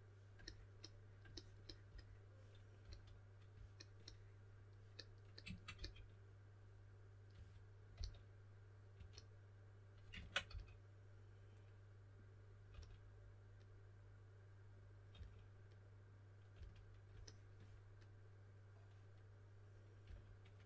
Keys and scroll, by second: 2.8 s, 5.7 typing, 7.3-8.9 typing, 10.4 typing, 12.7 typing, 15.1 typing, 16.5 typing, 20.0 typing.